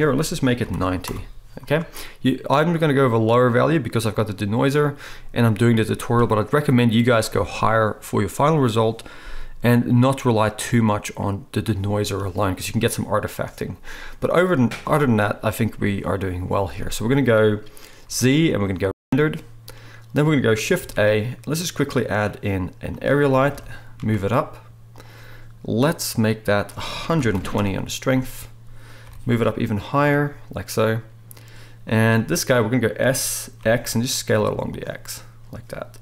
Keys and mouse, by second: 18.1 z, 20.7 shift+a, 23.5 g, 25.0 right click, 25.9 right click, 27.6-30.0 middle drag, 29.0 g, 30.0-33.0 right drag, 33.0-36.0 drag, 33.0 s.